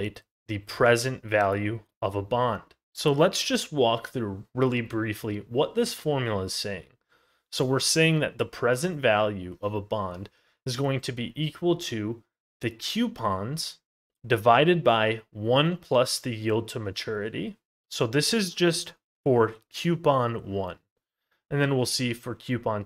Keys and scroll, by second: 2.8 ctrl+z, 21.4 ctrl+z.